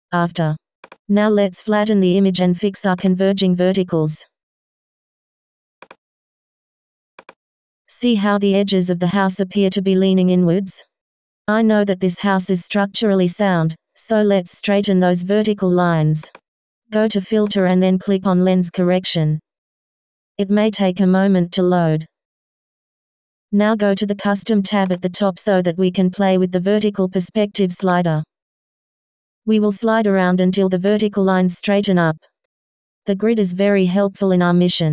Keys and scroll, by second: 10.1 v.